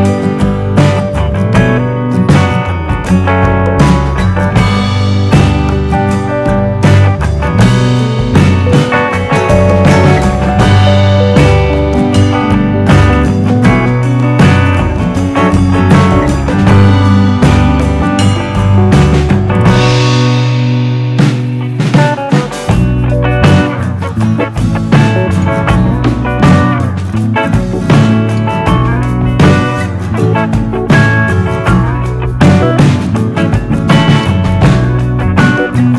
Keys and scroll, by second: 24.4 4, 24.4 4, 24.6 Return.